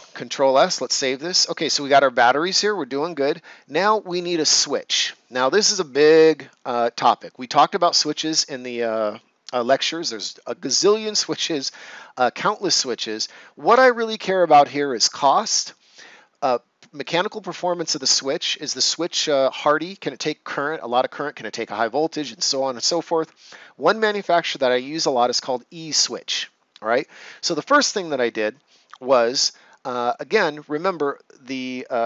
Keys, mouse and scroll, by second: 1.0 right click.